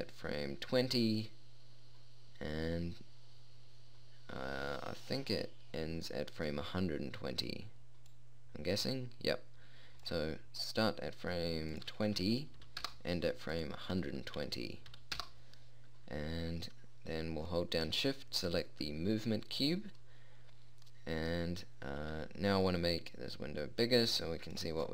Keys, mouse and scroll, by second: 0.5-2.4 drag, 8.6-12.2 drag, 12.3-21.4 drag, 21.4 middle click, 21.4-21.8 scroll down 1.